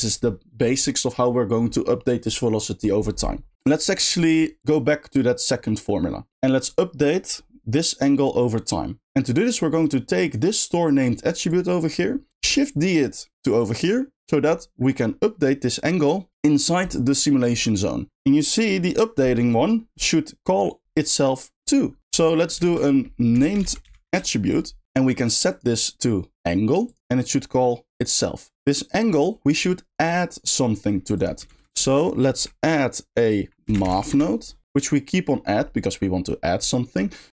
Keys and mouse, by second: 3.5 g, 4.0 drag, 4.8-6.2 middle drag, 9.3 middle click, 11.5 click, 13.4 shift+click, 14.2 shift+middle click, 22.2 middle click, 22.7 shift+a, 25.6-27.0 drag, 27.2-28.0 drag, 28.5 click, 31.1 click, 34.6 click.